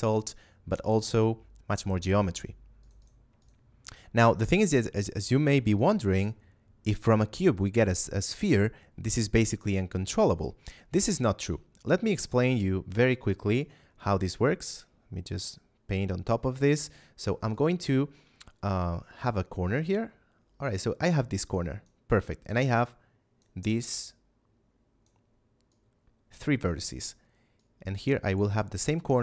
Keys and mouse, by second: 2.7 click, 11.8 middle click, 13.4 click, 17.4 click, 22.5 click.